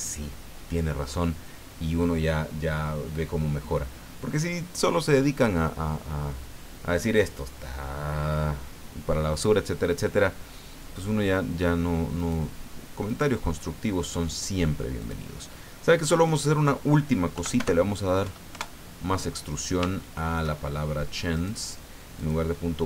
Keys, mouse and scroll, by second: 12.2 right click, 13.0 right click, 15.0 click, 16.3 click, 17.3 End, 17.6 BackSpace, 18.2 KP_2, 18.5 KP_Enter, 19.9 shift+middle click, 20.6-21.3 shift+scroll up 3, 21.3 right click, 22.1 click.